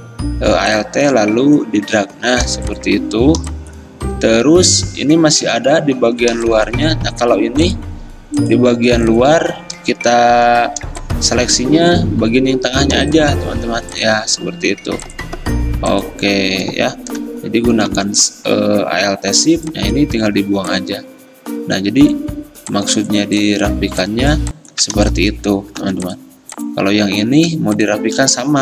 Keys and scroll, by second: 2.5 v, 6.5 v, 7.3 ctrl+alt+2, 10.5 ctrl+2, 14.0 ctrl+2, 18.0 m, 25.9 v.